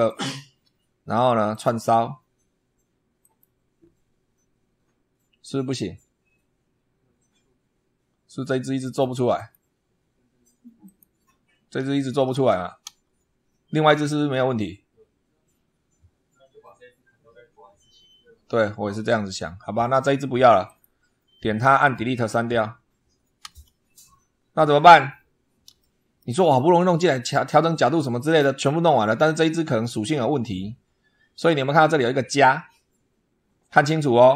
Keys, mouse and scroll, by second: 1.4 click, 3.0 click, 8.7 click, 9.2 click, 10.7 click, 12.7 Delete, 18.8 scroll up 2, 20.5 click, 23.2 Delete, 24.6-25.0 scroll down 2, 25.6 shift+middle click, 28.1 click.